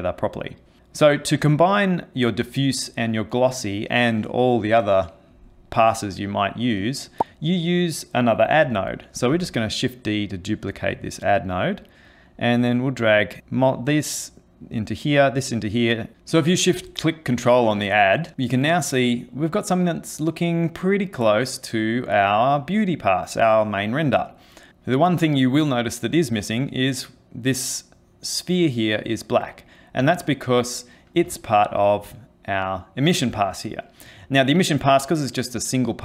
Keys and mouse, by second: 6.8 click, 7.6 click, 9.3 shift+d, 12.1 click, 14.6 click, 17.1 ctrl+shift+click, 19.4 middle click, 20.3 middle click, 26.0 middle click, 31.5 ctrl+shift+click.